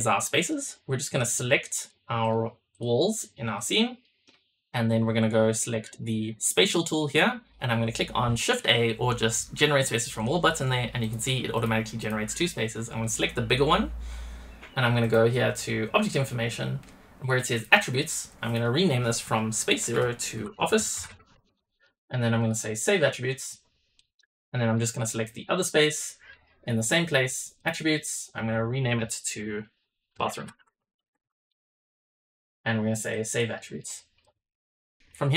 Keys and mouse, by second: 0.1 middle drag, 1.1 click, 1.7 shift+drag, 2.1 shift+drag, 2.6 shift+drag, 3.1-3.6 shift+drag, 3.9 shift+click, 10.0 click, 10.9 click, 11.4 click, 11.9 click, 15.1-16.0 drag, 18.4-22.3 drag, 20.7 shift+f, 23.0-23.7 drag, 24.0 click, 25.2 click, 27.5-32.3 drag, 31.0 shift+o, 33.1-34.3 drag.